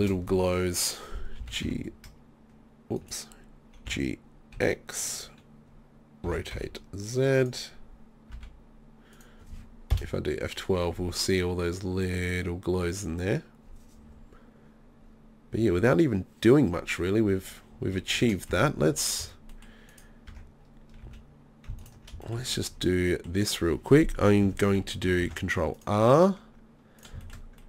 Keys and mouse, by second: 0.0 Escape, 1.4 g, 3.8 g, 5.2-6.2 drag, 6.2 r, 7.5 click, 8.3 g, 18.2 Escape, 18.5-19.2 middle drag, 19.2 Tab, 20.3 Tab, 21.0 z, 25.2 ctrl+r.